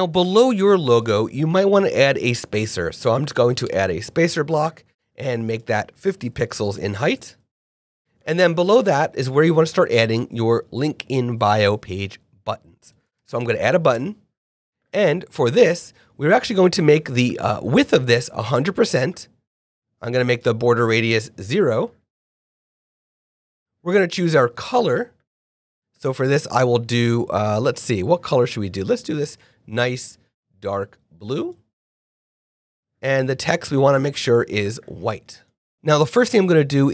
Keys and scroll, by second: 1.9-2.7 typing, 3.6 Return, 6.5 super+5, 6.8 super+a, 7.1 super+5, 7.7 Return, 12.9 /, 13.0 b, 13.9 Return, 20.8 BackSpace, 21.1 0, 35.7 f, 35.7 shift+super+Left.